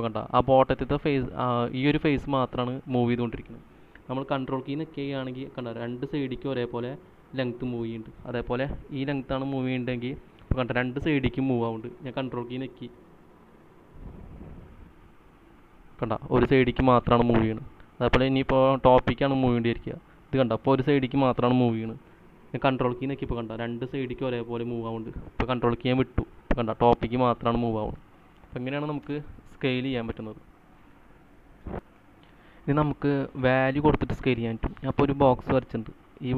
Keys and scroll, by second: 29.3 space, 32.1 c.